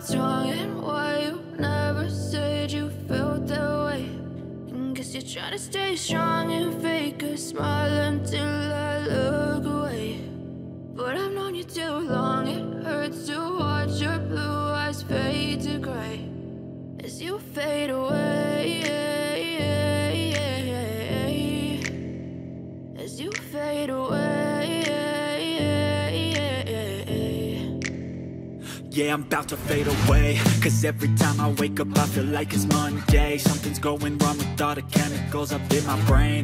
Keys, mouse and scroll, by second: 0.1-7.8 drag, 7.8 n, 9.6 click, 11.6-16.9 drag, 17.5 click, 17.5-24.6 drag, 24.6-28.4 drag, 28.4 p, 29.1 click, 30.2 shift+r, 30.9-35.0 drag, 35.0-36.4 scroll down 1.